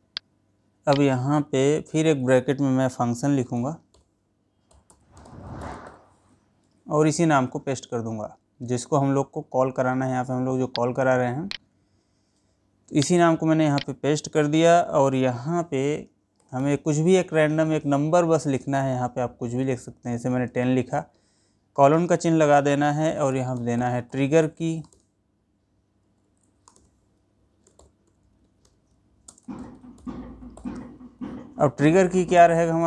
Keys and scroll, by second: 7.1 ctrl+v, 29.8 space.